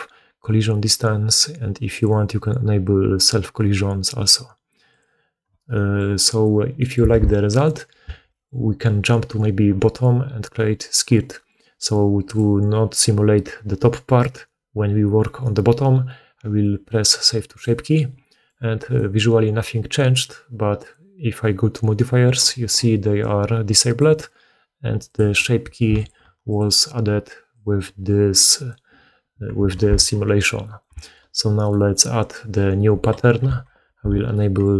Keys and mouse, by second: 1.9-4.8 middle drag, 4.8 click, 4.9-6.2 middle drag, 6.2 right click, 6.3-7.4 middle drag, 7.0 alt+a, 7.4 right click, 7.5-18.9 middle drag, 8.0 alt+a, 12.2-20.9 drag, 18.7 right click, 20.9-23.1 middle drag, 23.1-25.0 drag, 25.0-25.9 middle drag, 25.9-26.5 ctrl+drag, 26.5-27.5 middle drag, 27.5-34.7 drag, 29.6 alt+a, 33.6 shift+2.